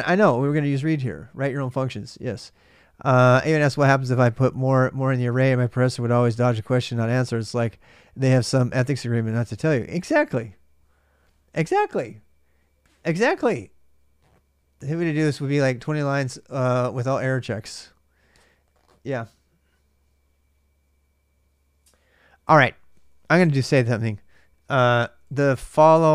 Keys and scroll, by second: 23.7-26.1 typing.